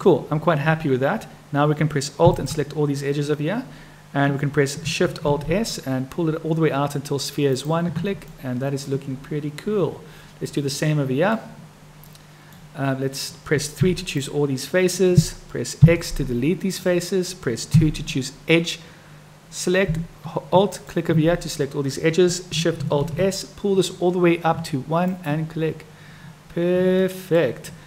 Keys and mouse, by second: 2.3 alt+click, 5.3 alt+shift+s, 8.4 click, 10.8 middle click, 12.1 middle click, 14.1 click, 20.6 alt+click, 21.7 click, 23.0 alt+shift+s, 27.0 click, 27.3 middle click.